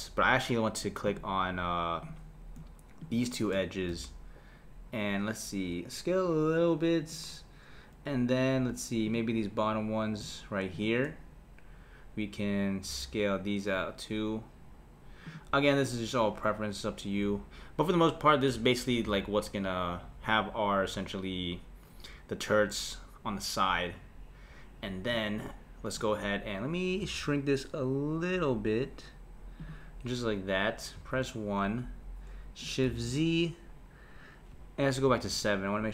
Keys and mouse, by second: 1.1-2.1 drag, 3.0 shift+click, 3.9 s, 9.0 click, 10.7 shift+click, 12.9 s, 17.2 Tab, 27.0 s, 31.0 KP_1, 32.9 shift+z, 35.1 KP_7.